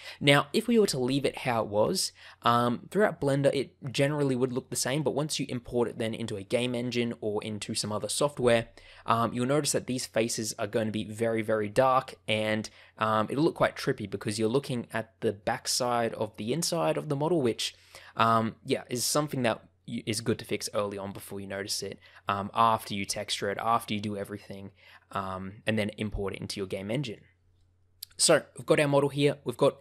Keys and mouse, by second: 0.2 middle click, 12.3 middle click, 27.5-28.8 middle drag, 29.4 middle click.